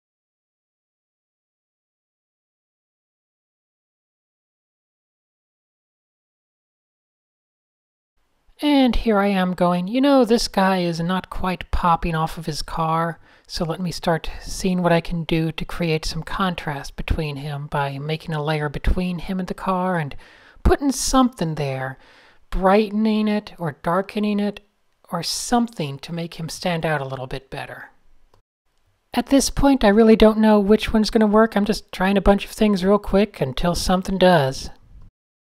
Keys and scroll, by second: 0.0 super+z, 3.3 super+z, 4.0 super+z, 4.5 Tab, 5.3 alt+super+l, 5.4-8.2 typing, 8.6 super+z, 8.8 super+z, 9.4 super+a, 10.2 alt+super+g, 11.9 shift+super+a, 12.0-13.9 typing, 16.1-17.8 typing, 19.4 shift+super+a, 19.5 typing, 20.3 super+z, 24.6 n, 25.4 super+z, 27.6 a, 28.3 super+h, 28.6 super+a, 29.7 shift+super+a, 30.7 super+a, 31.9 shift+super+a, 32.5 n, 33.2 super+z, 34.4 super+z, 35.4 super+z.